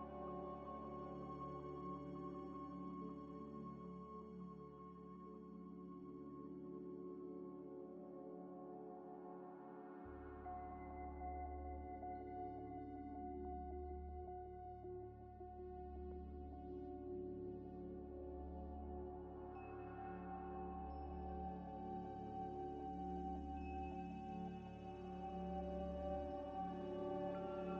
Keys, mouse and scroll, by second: 1.7 z, 2.1 scroll up 1, 2.4 g, 2.4 x, 4.7 double click, 5.0 middle click, 5.9 shift+click, 6.4 shift+click, 6.8 ctrl+-, 8.3 shift+d, 9.8 double click, 11.1 scroll down 1, 14.5 middle click, 15.0 g, 15.0 x, 16.2 Tab, 16.5 Tab, 17.0 middle click, 17.5 scroll down 1, 17.9 z, 18.4 z, 18.4 z, 19.3 z, 20.4 Tab, 20.7 Tab, 21.1 scroll down 1, 21.4 z, 22.0 scroll up 1, 24.2 z, 25.2 Tab, 25.6 scroll down 1, 26.1 Tab, 26.9 scroll down 1.